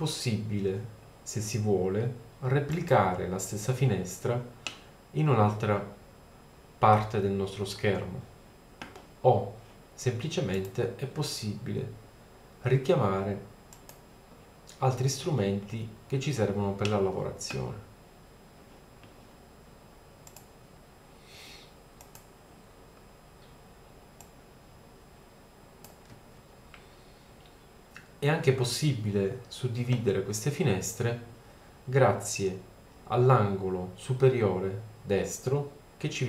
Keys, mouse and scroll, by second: 4.1 middle click, 4.6 middle click, 10.6 click, 11.8 middle click, 12.5-13.7 drag, 15.6-18.9 middle drag, 20.3-20.7 middle drag, 24.2-25.9 middle drag, 33.0-34.2 middle drag.